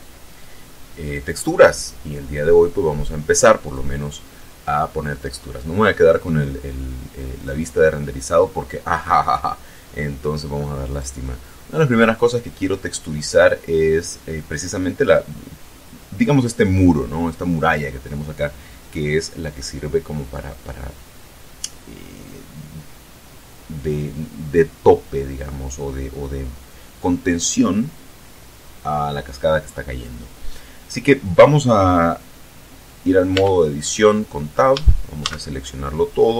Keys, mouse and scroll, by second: 3.8 click, 7.5 click, 10.9 right click, 33.4 Tab, 34.8 a.